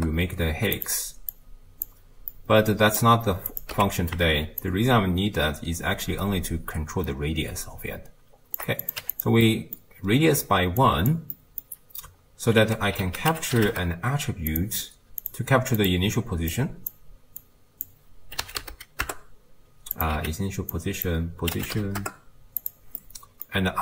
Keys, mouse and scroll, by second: 1.4-1.9 drag, 2.4-3.5 middle drag, 3.5 click, 3.7 x, 4.8-7.7 shift+drag, 9.2 click, 10.8-13.7 drag, 13.7 ctrl+a, 15.9-17.9 drag, 20.2 x, 20.8-21.1 drag.